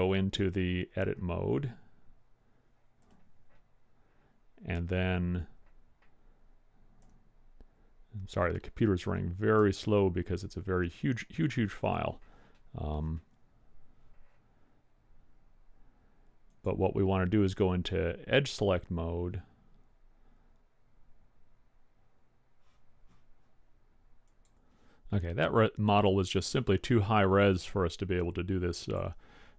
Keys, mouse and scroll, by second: 1.0 Tab, 1.0 click, 9.8 a, 11.9 a, 18.1 click, 29.1 click.